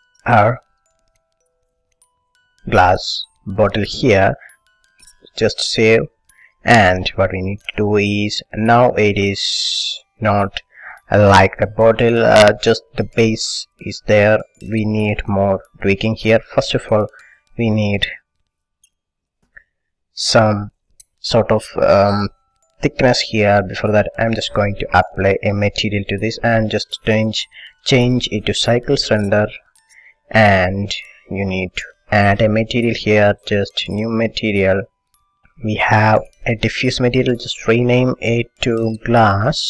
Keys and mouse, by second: 1.0-2.8 drag, 3.1-5.3 middle drag, 5.3 ctrl+s, 6.9-8.0 middle drag, 9.8 middle click, 12.3-15.4 middle drag, 15.6-20.8 middle drag, 26.9-28.8 drag, 29.7-31.4 middle drag, 31.4-39.6 drag.